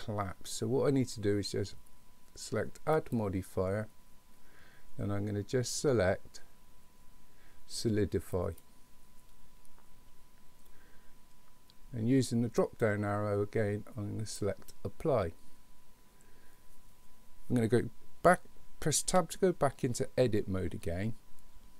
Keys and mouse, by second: 3.1-8.7 drag, 12.7-14.7 drag, 19.1 Tab.